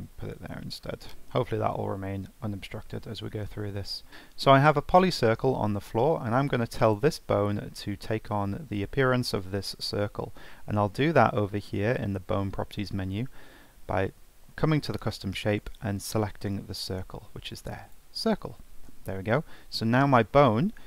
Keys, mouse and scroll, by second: 2.1 n, 3.6-4.1 middle drag, 4.9 drag, 6.8 click, 15.5-18.6 drag.